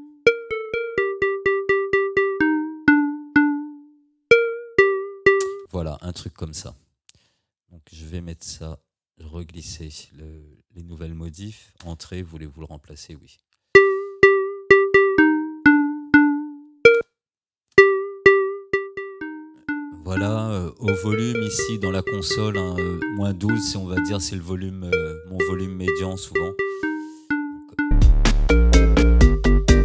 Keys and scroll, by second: 5.7 space, 11.9 Return, 13.8 space, 17.0 space.